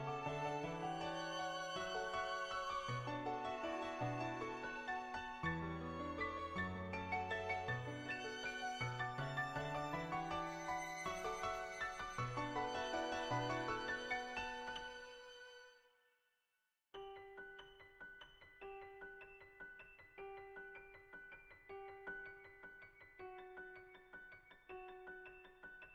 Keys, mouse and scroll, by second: 0.1 click, 7.0-8.1 middle drag, 12.7-19.9 right drag, 19.9 middle click, 23.2 middle click, 24.6 middle click.